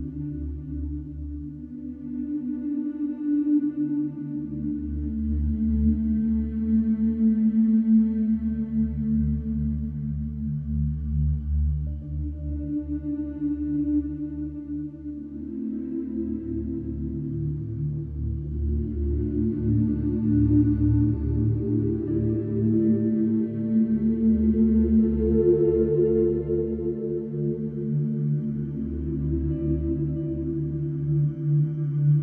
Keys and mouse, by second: 0.4 ctrl+alt+click, 2.0 click, 3.6 click, 5.4 f, 6.5 click, 11.2 ctrl+alt+click, 11.7 alt+shift+click, 12.2-13.5 ctrl+alt+drag, 14.0 ctrl+alt+click, 15.2 alt+shift+click, 16.4 click, 17.4 f, 18.0 click, 20.8 f, 21.7 click, 23.1 alt+click, 24.9 click, 26.7 click, 30.1 super+d.